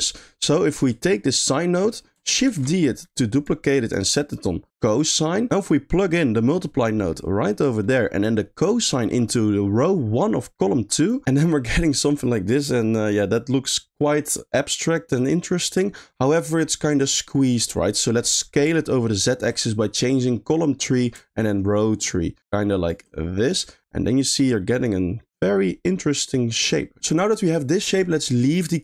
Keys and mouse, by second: 0.3 middle click, 0.9 click, 2.5 shift+d, 3.9-5.0 drag, 6.2-7.6 drag, 8.0 middle click, 8.7-11.1 drag, 11.2 middle click, 12.3 middle click, 15.5 middle click, 18.2 middle click, 21.4-22.9 shift+drag, 23.4 middle click, 24.0 middle click, 24.8 middle click, 25.4 middle click, 26.2 middle click.